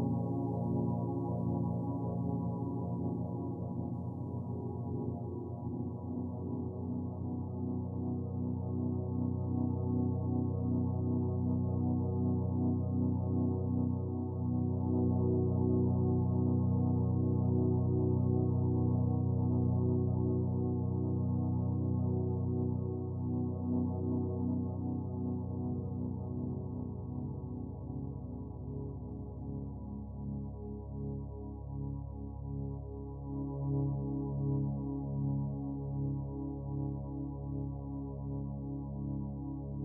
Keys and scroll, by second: 20.7 ctrl+t, 27.9 ctrl+u.